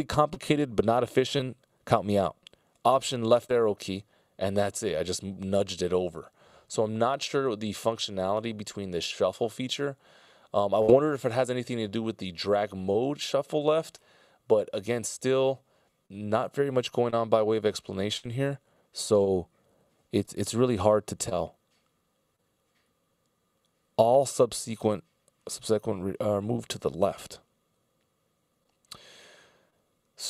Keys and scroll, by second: 3.4 alt+Left, 6.8 super+z.